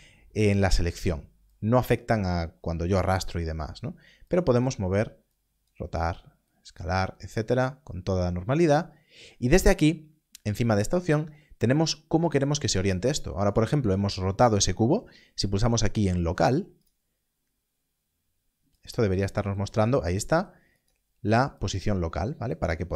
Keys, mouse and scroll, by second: 4.2 click, 6.7 click, 10.9 click, 18.7 click.